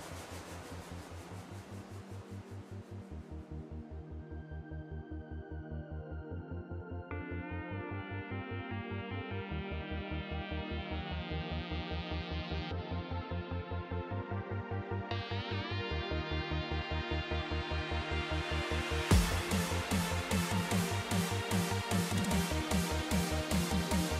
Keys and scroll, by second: 0.6 super+g, 2.2 ctrl+c, 5.0 ctrl+c, 6.1 super+=, 11.8 ctrl+c, 20.1 super+s, 21.4 super+-, 22.4 ctrl+c, 24.0 alt+shift+Down.